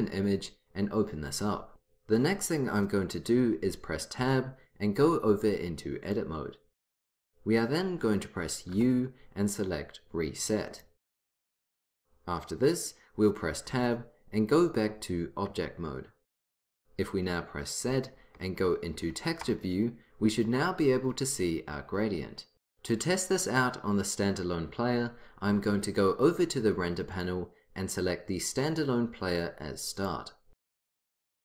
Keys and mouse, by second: 4.2 Tab, 8.8 u, 13.7 Tab, 17.9 z, 27.2-29.2 drag, 30.0-31.3 drag, 31.3 click.